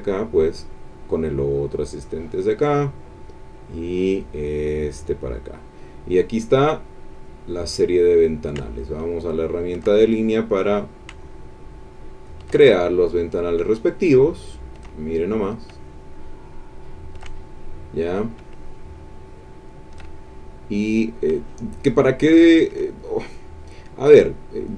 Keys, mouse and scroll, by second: 0.0-2.5 drag, 3.7-5.5 drag, 7.1 click, 8.4-9.9 shift+drag, 10.7-12.6 drag, 13.5-14.9 shift+drag, 15.5-17.3 shift+drag, 18.1-20.1 drag, 21.2-22.9 shift+drag, 24.6-24.7 drag.